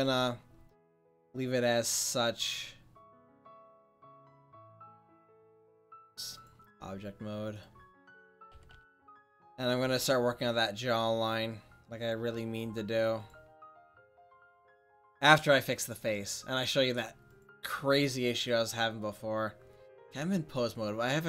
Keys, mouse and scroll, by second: 0.1 a, 3.9 Tab, 6.9 click, 7.7 right click, 8.5 a, 8.7 a, 9.3 middle click, 10.2 click, 10.9 click, 12.1 click, 13.1 click.